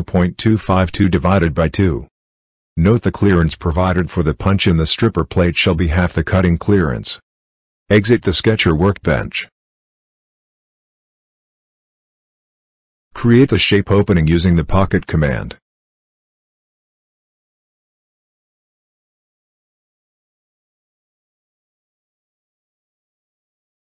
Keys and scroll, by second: 0.9 ., 1.3 2, 1.5 5, 2.6 /, 3.0 2, 3.4 Return.